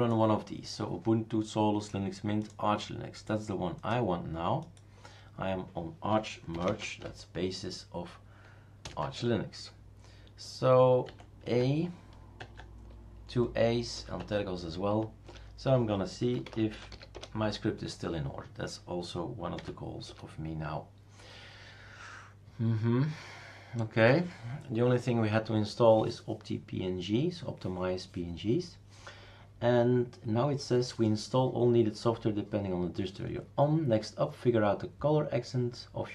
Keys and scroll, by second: 6.5 typing, 8.8 typing, 9.0 Tab, 11.0 a, 11.4 Tab, 12.4 Tab, 13.9-14.7 typing, 15.2 Return, 16.1-17.6 typing, 19.3-20.0 typing.